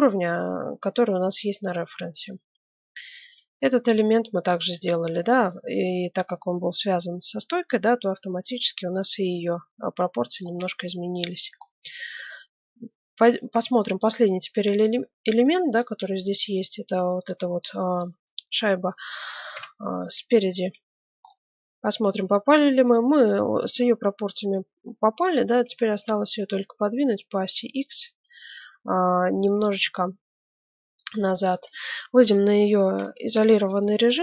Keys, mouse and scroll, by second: 0.1-0.9 scroll up 1, 0.9-2.2 scroll up 1, 1.4-5.2 middle drag, 2.2-2.5 scroll up 1, 3.2 z, 6.4-8.2 middle drag, 8.4 middle click, 9.3 KP_1, 10.0-12.0 middle drag, 11.8 z, 13.2 Tab, 13.7 middle click, 16.0 z, 17.1-19.0 drag, 19.5 KP_1, 20.2 z, 21.2-22.3 middle drag, 24.0-25.1 middle drag, 25.6 g, 30.1-32.2 middle drag, 32.2 KP_Divide, 32.8-33.8 middle drag, 33.0 z.